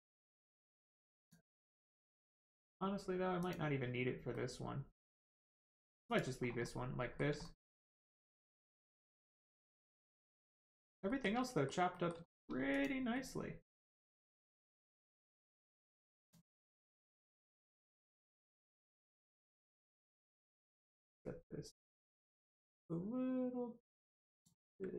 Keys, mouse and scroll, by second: 3.4 click, 4.3 middle click, 5.7 scroll down 1, 6.0 click, 6.4 scroll down 1, 6.6 middle click, 7.4 shift+middle click, 7.8 middle click, 7.9 middle click, 11.0 shift+middle click, 11.4 middle click, 11.4 middle click, 12.2 shift+middle click, 12.7 click, 13.1 middle click, 16.2 click, 16.6 middle click, 17.2 scroll up 1, 17.5 shift+middle click, 18.7 middle click, 18.8 middle click, 19.0 shift+middle click, 19.3 middle click, 19.4 middle click, 19.6 scroll up 1, 21.2 click.